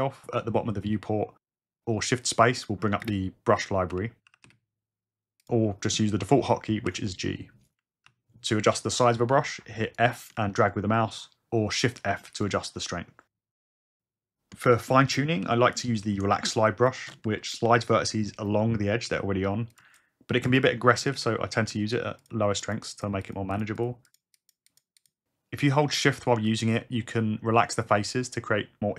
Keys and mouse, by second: 2.7 shift+space, 3.1 shift+space, 6.9 g, 8.1 f, 8.6 f, 9.9 click, 10.4 shift+f, 10.9 shift+f, 12.5 click, 14.0 BackSpace, 14.7 shift+space, 19.1 shift+f, 19.6 shift+f, 19.8 shift+click, 20.0 click, 21.2 ctrl+z, 21.8 shift+f, 22.2 shift+f, 22.3 shift+click, 23.0 click, 24.1 click, 24.4 click, 25.0 click, 25.2 ctrl+z.